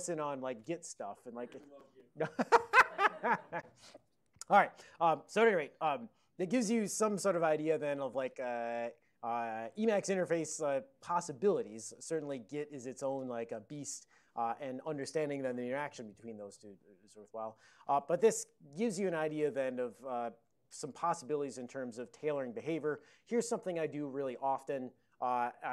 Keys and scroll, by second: 8.6 ctrl+x, 8.9 b.